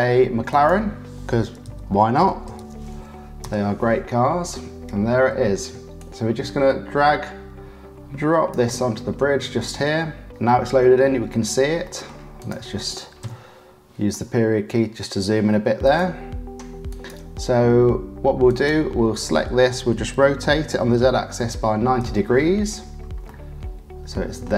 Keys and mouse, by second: 0.5-4.2 drag, 10.4 click, 10.6 middle click, 11.8 middle click, 12.4 click, 13.2 KP_Decimal, 14.1 middle click, 14.7 click, 15.8 click, 16.8 click, 18.4 click, 20.1 r, 23.2-24.4 middle drag.